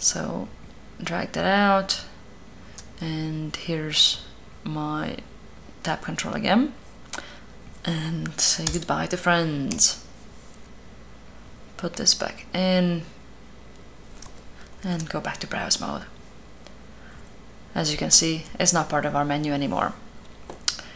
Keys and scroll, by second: 9.5 Return, 14.5 b.